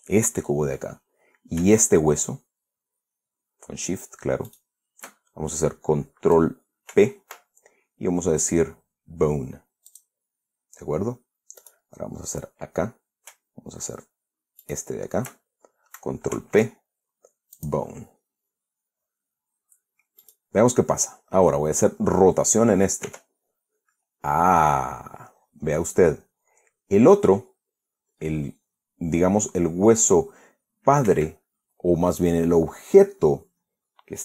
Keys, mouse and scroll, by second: 5.1 shift+click, 7.6 ctrl+p, 10.5 click, 12.2 click, 12.3 right click, 15.2 shift+right click, 17.0 ctrl+p, 18.2 click, 20.8 click, 23.7 r, 31.7 Escape.